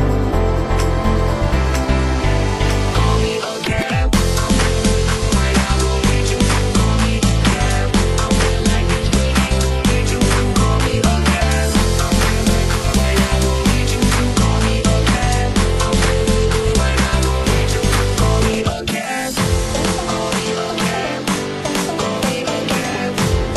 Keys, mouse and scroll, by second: 3.1 right click, 3.9 right click, 5.0 right click, 6.0 right click, 6.9 click, 7.1 right click, 8.5-9.5 right drag, 9.7 right click, 10.5 click, 12.1 w, 13.9 middle click, 14.4 e, 15.1 e, 15.9 e, 17.8 middle click, 18.5 e, 19.4 e, 20.2 e, 21.3 e, 22.1 click, 22.3 e.